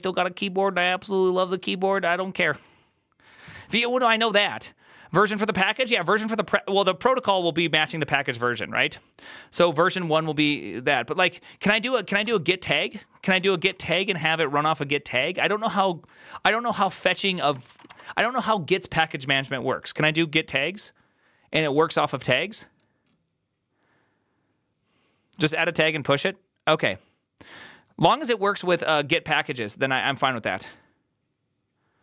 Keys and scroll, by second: 13.5 typing, 13.7 Return, 17.0-17.8 typing, 17.5 ctrl+shift+Left.